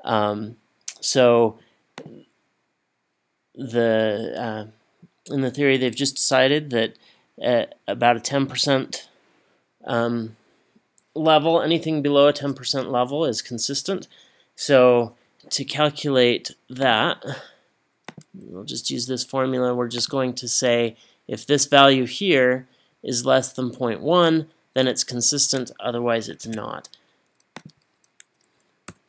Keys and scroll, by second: 26.5 Escape, 28.9 =.